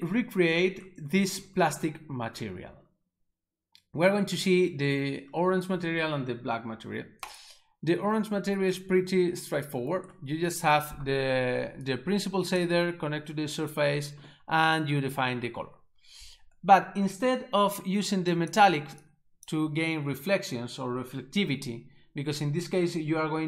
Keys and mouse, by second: 7.3 right click, 11.9 click, 18.4 click, 19.1 click.